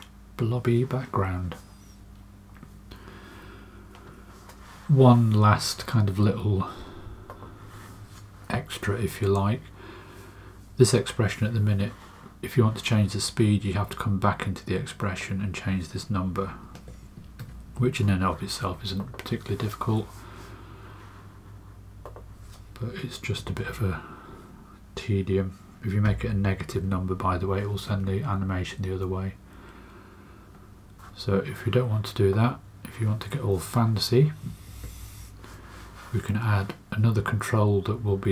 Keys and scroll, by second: 16.7-17.3 typing, 23.3 BackSpace, 23.5 BackSpace, 26.0-27.1 typing, 27.8 Return, 34.6 space.